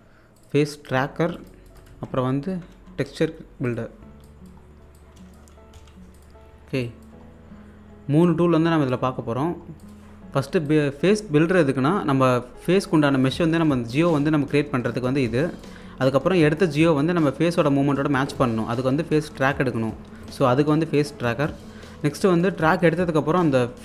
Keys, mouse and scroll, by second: 0.0-0.2 typing, 0.4 click, 1.9 Tab, 2.3-3.4 typing, 3.7 click, 4.2-5.0 scroll down 2, 4.3 click, 5.0 click, 5.7 l, 6.1 click, 6.4-6.7 scroll up 1, 6.8 alt+click, 7.2-8.2 scroll up 1, 8.2 click, 9.3-9.8 scroll down 1, 9.8 click, 10.1-10.6 scroll up 1, 10.7-12.5 drag, 12.6-13.0 scroll up 1, 13.0 click, 15.4 click, 20.2-23.8 alt+drag.